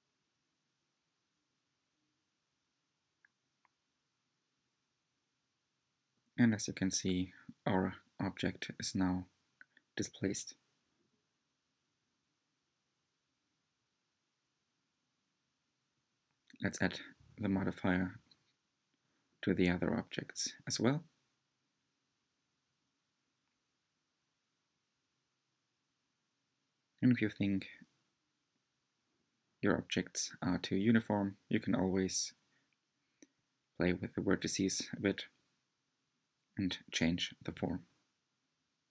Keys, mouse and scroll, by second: 2.7-4.9 middle drag, 4.9-5.6 scroll up 3, 5.6-12.4 middle drag, 12.4-12.8 scroll down 2, 13.7 click, 14.3-18.2 shift+drag, 18.2-19.1 scroll up 2, 21.0 l, 22.1 click, 22.1 scroll down 1, 22.5-23.6 shift+middle drag, 23.6 scroll up 3, 24.2-26.1 shift+middle drag, 26.1 click, 26.6 Tab, 28.2 click, 29.2 click, 29.7 g, 32.4 click, 32.7 g, 36.1 click, 36.4 g.